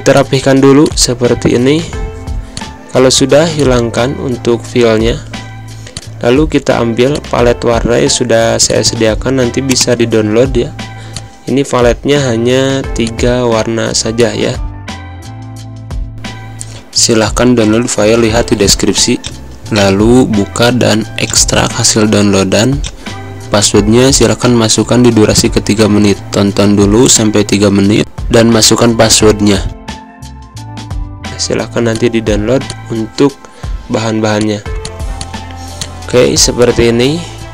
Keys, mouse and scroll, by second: 0.0 click, 0.3 space, 0.7-2.4 drag, 3.2 space, 3.4 click, 3.6 space, 4.5 Pause, 5.8 click, 8.3 click, 11.6-12.9 drag, 31.3-34.3 drag, 34.9 space, 35.1 click, 35.3 space, 35.7 click, 36.4 space, 36.6-37.5 drag.